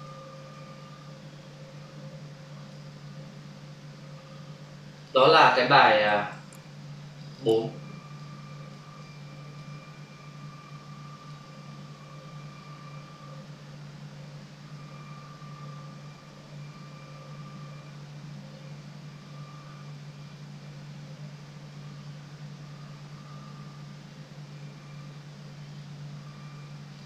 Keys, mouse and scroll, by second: 0.4 ctrl+alt+w, 2.5 click, 4.9 click, 7.2 click, 7.4 click, 7.5 double click, 8.2 click, 9.0 click, 11.2 click, 26.9 click.